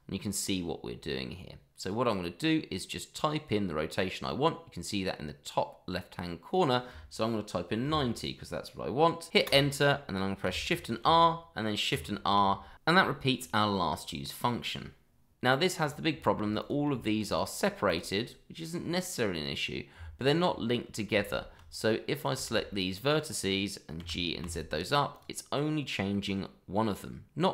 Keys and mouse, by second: 7.7 KP_9, 7.9 KP_0, 9.4 Return, 11.0 shift+r, 15.5 shift+middle drag, 16.8 click, 17.0 shift+middle click, 17.3 click, 17.7 click, 17.9 click, 18.1 click, 18.3 middle drag, 19.9 Tab, 20.7 middle click, 21.2 shift+z, 21.7-22.2 drag, 22.7-23.0 middle drag, 24.0 g, 24.4 z, 25.1 click, 26.1-27.5 middle drag.